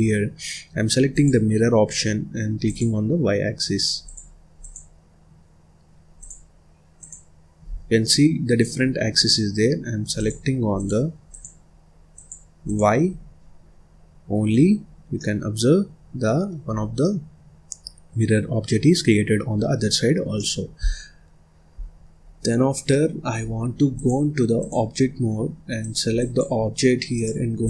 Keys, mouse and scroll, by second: 1.2 click, 2.6 click, 4.0 click, 4.5 click, 6.1 click, 6.9 click, 7.7 scroll down 1, 7.9 middle click, 8.8-10.1 scroll up 1, 10.1 click, 10.7 click, 11.2 click, 12.1 click, 12.6 click, 13.6-13.9 scroll up 2, 14.7 scroll up 3, 15.0 scroll down 1, 15.1-16.6 middle drag, 16.6 scroll up 2, 16.8 scroll down 1, 17.0-19.5 middle drag, 19.5-19.9 scroll down 5, 19.9-20.2 scroll up 2, 20.2 scroll down 1, 20.3 middle click, 20.8-21.1 scroll down 4, 21.1-21.7 scroll up 1, 21.7-22.1 scroll down 4, 22.1 scroll up 1, 22.6 scroll down 1, 22.8-23.9 middle drag, 23.9-25.8 drag, 27.0-27.6 drag.